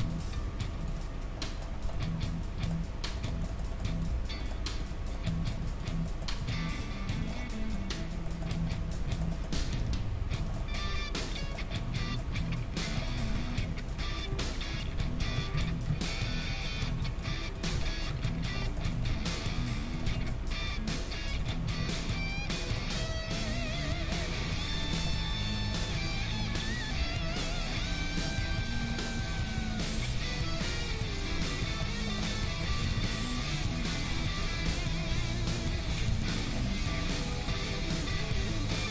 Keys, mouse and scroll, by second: 0.1-1.4 right drag, 0.3 g, 3.8 middle click, 4.0-7.6 right drag, 6.5 e, 7.6-12.9 middle drag, 9.6 e, 10.9 r, 12.3 g, 13.4 ctrl+Tab, 14.2 click, 14.9-17.9 right drag, 14.9 f, 15.5 ctrl+z, 15.9 ctrl+z, 17.0 f, 17.7 f, 18.2 ctrl+Tab, 19.1 g, 20.7 g, 22.2 g, 22.4-24.9 right drag, 22.6-24.7 middle drag, 23.1 g, 25.3-31.2 right drag, 25.5 g, 26.2-30.1 middle drag, 27.0 g, 28.4 g, 29.5 g, 32.1 middle click, 32.9 ctrl+Tab, 34.0-37.2 right drag, 34.7 f, 35.7 f, 36.1 ctrl+Tab, 36.4-38.9 middle drag, 37.3-38.9 right drag.